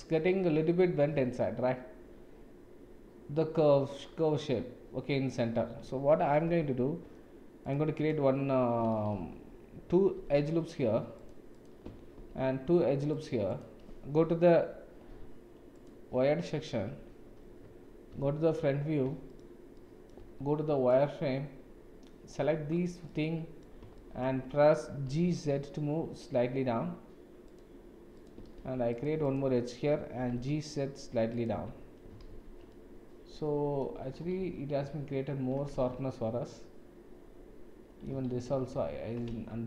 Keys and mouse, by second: 1.1 Tab, 6.4 ctrl+r, 9.2 ctrl+z, 10.2 ctrl+r, 12.2 ctrl+r, 15.1 1, 18.1 KP_7, 19.8 shift+middle click, 20.2 shift+z, 21.0-22.3 drag, 23.1 middle click, 24.0 shift+middle click, 25.0 g, 28.2 click, 28.6 ctrl+r, 30.2 g, 31.6 Tab, 32.3 shift+z, 32.7-33.8 middle drag, 34.4 ctrl+z, 34.8 ctrl+z, 35.7 Tab, 36.1-38.0 middle drag, 38.3 ctrl+z, 38.7 ctrl+z, 39.3 Tab.